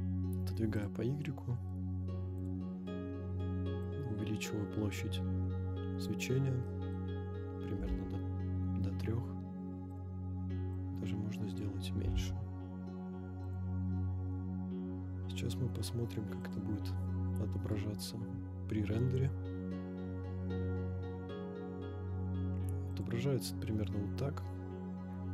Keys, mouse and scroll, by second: 0.9 drag, 1.0 scroll down 1, 1.2-1.7 middle drag, 2.4 click, 3.8-6.2 drag, 6.3-6.7 scroll up 1, 6.7 middle click, 7.8 g, 7.9 z, 10.0-11.7 drag, 12.0 g, 13.5 click, 14.3 KP_0, 15.3-18.5 scroll up 1, 18.5 click, 22.9 click, 23.4-23.8 scroll down 2, 24.4 scroll up 1.